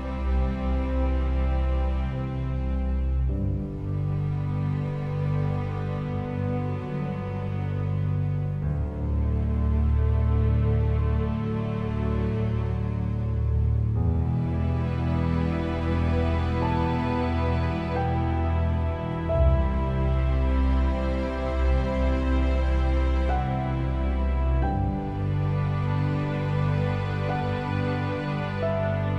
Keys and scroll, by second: 3.7 v, 9.9 2, 10.2 6, 10.6 Return, 12.6 p, 18.2 3, 18.7 5, 19.0 Return, 25.9 1, 26.3 5, 27.2 Return.